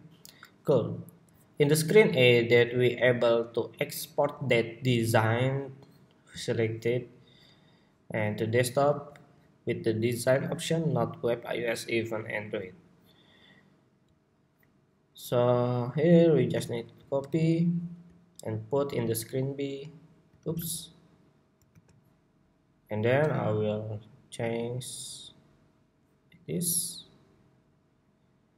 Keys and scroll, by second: 17.0 super+c, 18.8 super+v, 20.2 super+z, 21.4 super+v.